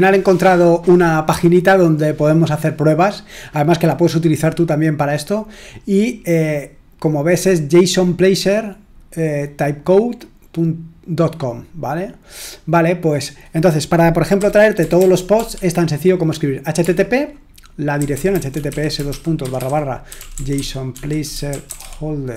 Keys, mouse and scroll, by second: 13.2 click, 14.1-22.3 typing.